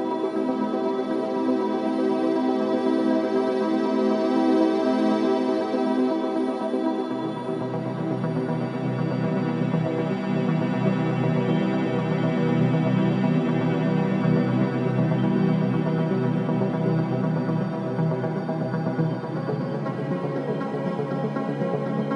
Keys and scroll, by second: 1.4 ctrl+d, 1.6 Escape, 2.5 Escape, 4.8 Escape, 14.8 ], 16.6 4, 18.0 3.